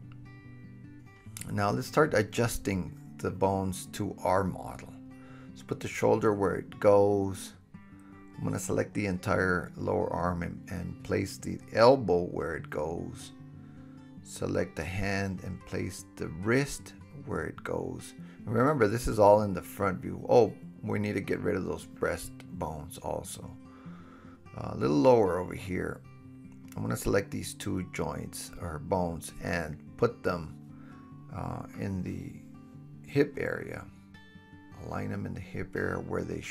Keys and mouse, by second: 0.4-4.1 drag, 0.4 right click, 1.2-4.1 middle drag, 1.2-4.1 right drag, 4.1 g, 5.6-8.4 drag, 8.4-11.4 middle drag, 9.8 g, 11.4 click, 12.0-13.9 middle drag, 12.9 g, 13.9-18.7 drag, 14.3 r, 15.5 g, 18.7-20.4 middle drag, 19.4 Delete, 23.0 shift+middle click, 23.2 shift+middle click, 23.4-27.9 shift+middle drag, 27.6 g, 29.0-29.4 drag, 30.5 g, 31.2-31.6 drag, 32.6 g, 33.3-33.6 drag, 34.0 g, 35.0-36.5 drag, 35.0 middle click, 35.0 right click, 36.2 KP_1.